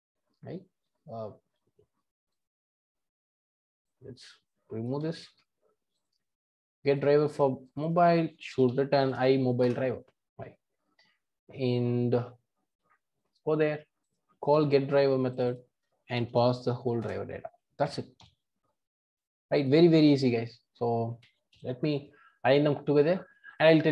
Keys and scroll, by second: 6.9 super+b, 9.9 Return, 17.0 Return, 21.3 super+a, 21.6 ctrl+alt+i.